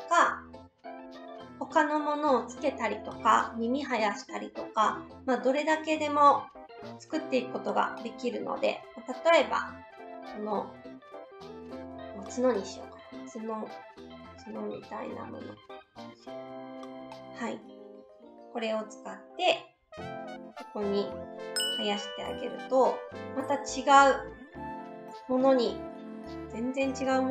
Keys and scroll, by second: 20.0 s.